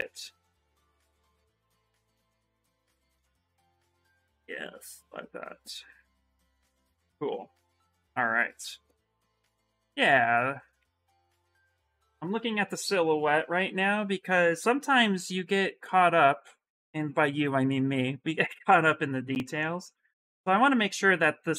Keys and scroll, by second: 2.4-3.4 typing.